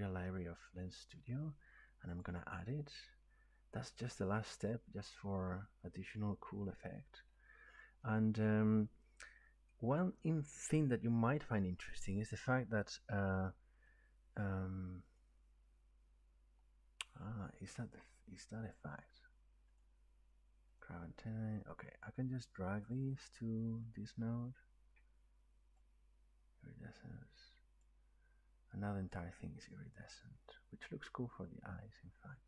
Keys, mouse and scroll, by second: 0.6 click, 2.2 click, 7.5 middle click, 7.6 middle click, 8.8 middle click, 9.7 right click, 13.9 click, 15.2 click, 19.8 click, 20.8 click, 27.8 click, 30.5-31.2 scroll.